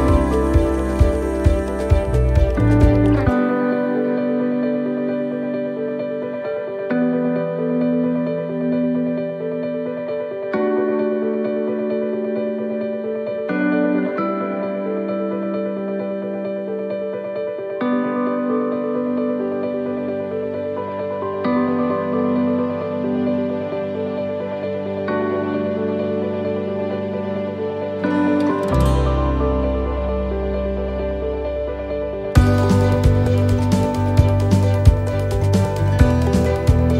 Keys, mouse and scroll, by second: 0.1 g, 8.5 middle click, 9.3-11.5 scroll up 4, 12.3 g, 17.6 middle click, 18.4-19.8 scroll down 1, 20.1 g, 32.9 click, 35.8 right click.